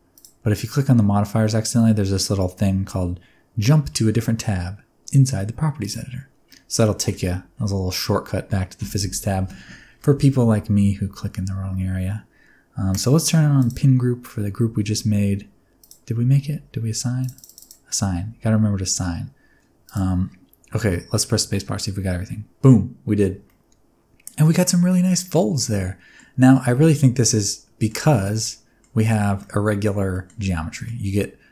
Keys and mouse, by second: 5.8 click, 12.9 click, 16.2 Tab, 17.2 click, 17.3 click, 18.1 Tab, 19.8 click, 21.6 space, 23.2 space, 23.4 middle click, 24.5 middle click, 24.9 middle drag, 25.1 middle drag, 25.6-26.2 middle drag, 26.4 middle click, 26.7 z, 27.2-27.9 middle drag, 28.0 z, 28.4-28.8 middle drag, 29.4-29.8 middle drag, 30.1 middle click, 30.7 middle click.